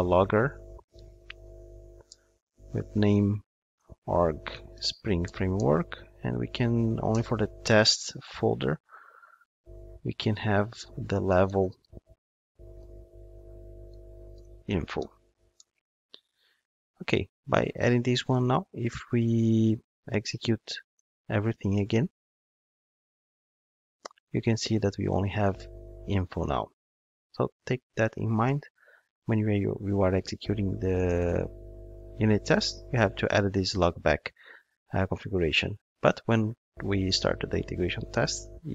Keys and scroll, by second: 5.5 Return, 20.8 ctrl+shift+d.